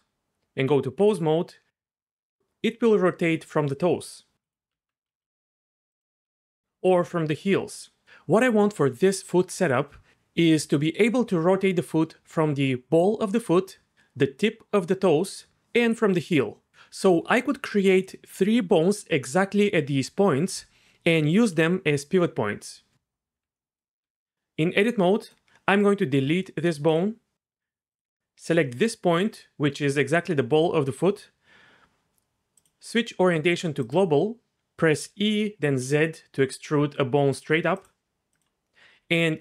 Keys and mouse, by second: 1.0 r, 4.7 Tab, 5.1 g, 6.3 Tab, 6.9 r, 23.5 middle click, 24.0 Tab, 25.3 click, 26.3 x, 27.9 click, 32.5-34.2 drag, 35.0 e, 35.7 z, 37.7 click, 38.3 click, 39.3 g.